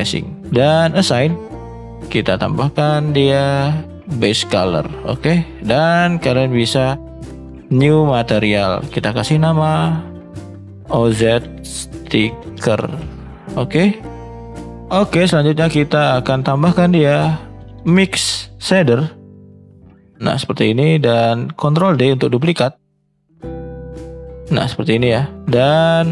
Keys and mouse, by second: 15.2 shift+a, 21.7 shift+d.